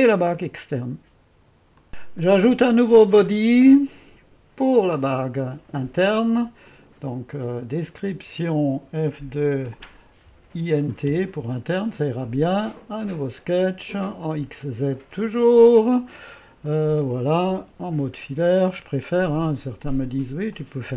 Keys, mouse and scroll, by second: 1.7 click, 4.7 click, 9.1 F2, 10.1-11.4 typing, 13.2-17.0 drag, 17.0 middle click, 17.1-18.2 typing, 20.6-20.9 drag.